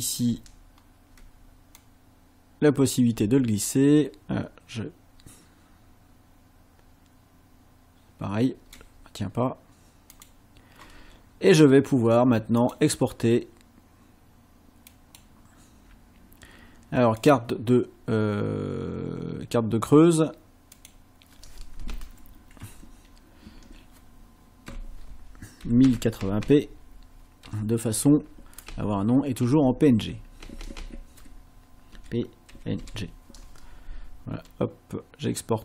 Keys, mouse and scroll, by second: 0.7 ctrl+scroll down 2, 1.8-8.9 drag, 10.1 click, 12.6 click, 14.9 click, 17.2 click, 20.7 click, 23.4 Left, 25.6-27.4 typing, 28.7 Right, 29.5 Right, 29.9 Left, 30.4 shift+Right, 31.9 p, 32.5 n, 32.8 g.